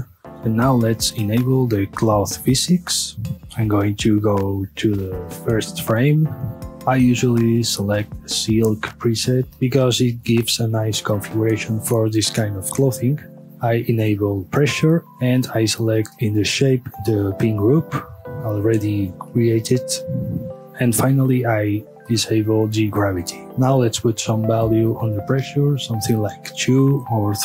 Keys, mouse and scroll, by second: 0.4 click, 1.1-2.5 scroll up 1, 2.5-6.7 drag, 6.9-9.5 drag, 12.5-13.5 scroll down 2, 13.5-14.1 scroll down 1, 14.1 click, 17.0-20.0 drag, 20.6-21.9 scroll down 2, 21.9-23.4 drag, 23.4 middle click, 23.6 middle click, 24.6-26.8 drag, 26.8 KP_Enter.